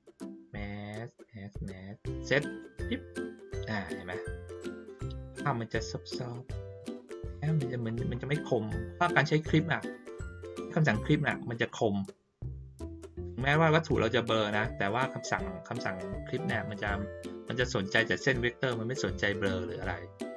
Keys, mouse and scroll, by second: 2.4 click, 4.3 ctrl+middle click, 4.7 ctrl+middle click, 9.0 middle click, 10.1 middle click, 10.4 middle click, 11.3 middle click, 13.2 middle click, 14.9 middle click.